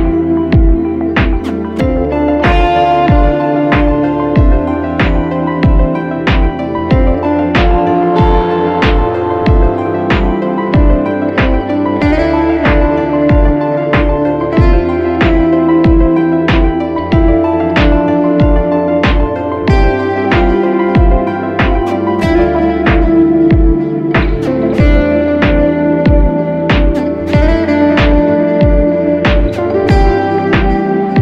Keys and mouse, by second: 1.6-4.4 ctrl+middle drag, 4.4-6.5 ctrl+middle drag, 6.5 click, 9.9 click, 12.8 g, 16.7 click, 19.9 g, 23.7-31.2 ctrl+middle drag.